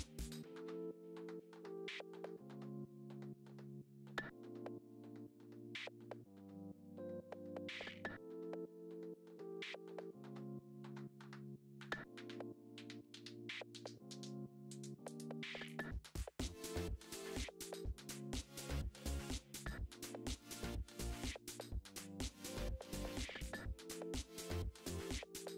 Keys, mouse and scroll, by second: 0.6 click, 1.0 alt+d, 2.6 click, 2.7-4.2 middle drag, 3.5 r, 4.2 KP_0, 5.6 click, 5.8-7.8 middle drag, 6.4 scroll up 1, 6.7 scroll down 1, 7.2 alt+d, 7.8 click, 8.6 Tab, 8.8 click, 9.3 shift+s, 10.5 click, 10.6 Tab, 11.2 click, 11.6 middle click, 11.8 Tab, 12.6 click, 13.0 KP_7, 13.3-15.3 shift+middle drag, 14.0 g, 15.3 KP_1, 15.7-21.1 shift+middle drag, 15.8 scroll up 1, 16.1 g, 17.3 scroll down 2, 18.4 KP_7, 21.1 KP_1, 22.0 click, 22.1-24.7 middle drag, 22.5 r.